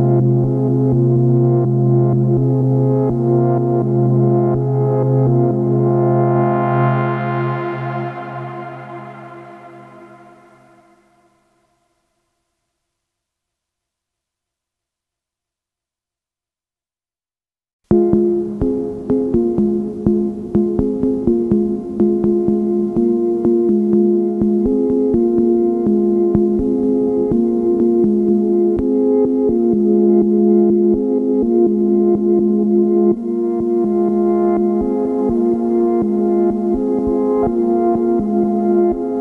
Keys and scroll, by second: 12.2 ctrl+k, 15.8 ctrl+k, 25.2 ctrl+q, 25.7 ctrl+k, 26.0 ctrl+u.